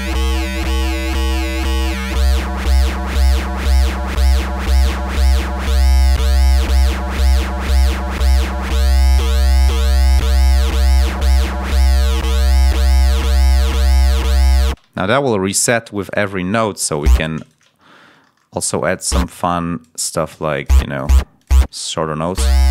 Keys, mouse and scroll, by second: 6.3 click, 7.4 right click, 7.7 click, 14.6 space, 14.9 ctrl+scroll up 2, 15.5 ctrl+scroll up 2, 16.1 ctrl+scroll up 3, 17.3 shift+right click, 17.7 ctrl+shift+scroll up 2, 19.0 click, 20.2 d, 20.5 click, 20.9 click, 21.3 click, 22.2 l.